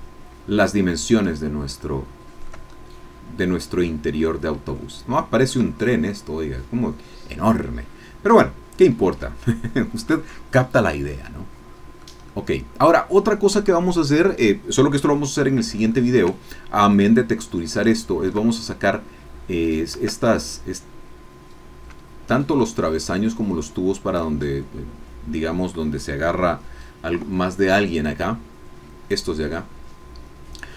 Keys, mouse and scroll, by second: 1.1-2.6 shift+middle drag, 2.7-4.0 shift+middle drag, 4.1-4.5 scroll up 2, 4.7 shift+click, 8.9 scroll down 2, 9.5 shift+middle click, 10.9-12.1 middle drag, 12.3 middle click, 15.5 scroll down 2, 15.9-17.0 shift+middle drag, 17.9 shift+middle click, 20.2-20.6 shift+scroll up 3, 20.7 scroll down 2, 22.1 scroll down 2, 29.2 click.